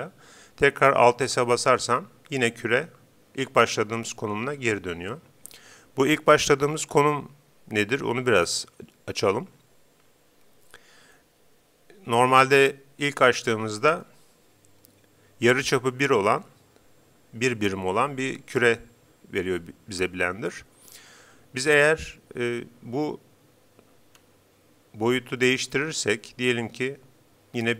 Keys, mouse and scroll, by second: 1.4 alt+s, 24.2 s.